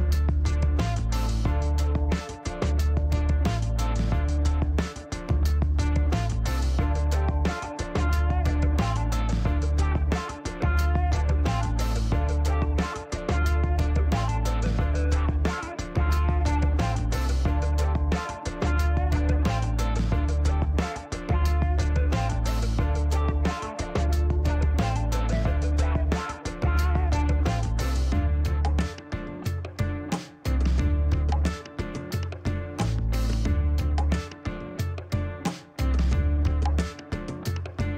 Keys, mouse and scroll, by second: 0.5 shift+right click, 3.1 scroll down 1, 4.3 click, 6.2 click, 7.1 ctrl+click, 7.8 shift+right click, 10.8 click, 11.7 click, 14.5 click, 16.6 click, 18.2 click, 21.9 click, 23.6 click, 24.5 shift+right click, 26.5 shift+scroll up 1, 27.6 click, 27.8-28.2 scroll down 1, 28.2 scroll up 1, 28.3 scroll down 1, 28.7 shift+right click, 32.0 scroll down 2, 32.3 middle click, 34.5 click, 35.5 click, 36.7 click, 37.3 middle click, 37.5 scroll down 1.